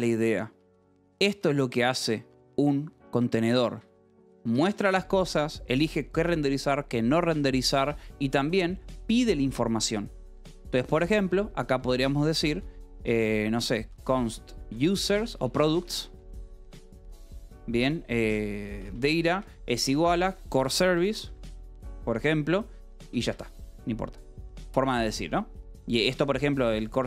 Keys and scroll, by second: 0.9 j, 1.8 shift+v, 3.6 Escape, 3.7-5.3 typing, 7.7 Escape, 8.1 k, 9.7 Escape, 10.8-17.2 typing, 18.4-23.0 typing, 23.2 Escape, 25.5 k, 26.6 h, 26.9 a.